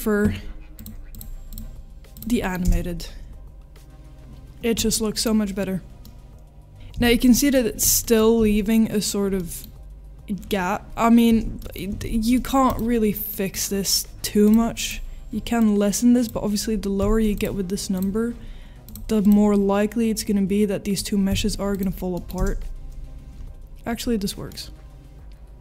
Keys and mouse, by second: 0.8 click, 1.1 click, 2.2 click, 2.4 middle drag, 2.6 space, 4.9-5.2 middle drag, 6.0-6.8 middle drag, 6.9 space, 7.2-7.5 middle drag, 8.1-9.2 middle drag, 9.4 middle click, 11.7-12.1 middle drag, 12.1 ctrl+s, 12.4 middle click, 13.3 middle click, 14.5 click, 14.8-17.4 drag, 18.8 click, 19.2-21.7 drag, 22.1 middle drag, 22.3 space, 23.7-24.0 middle drag, 24.6-25.6 middle drag.